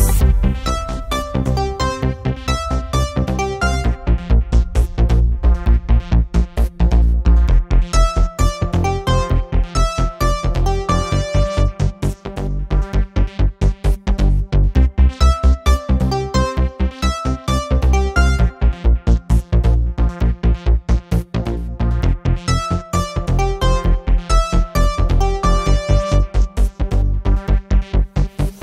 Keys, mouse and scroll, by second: 2.1 click, 3.0-6.9 drag, 7.7 click, 9.1-10.9 drag, 11.6-13.5 drag, 14.5 click, 15.4-16.8 drag, 18.1 click, 18.9 click, 21.3 click, 23.2 click, 24.6 click, 26.1 shift+click, 27.7 shift+click, 28.5 KP_6.